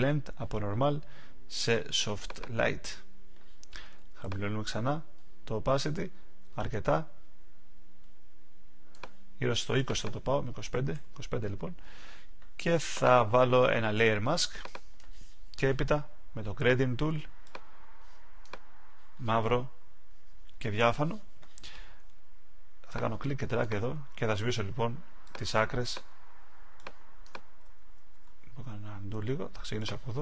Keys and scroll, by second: 27.9 alt+super+z.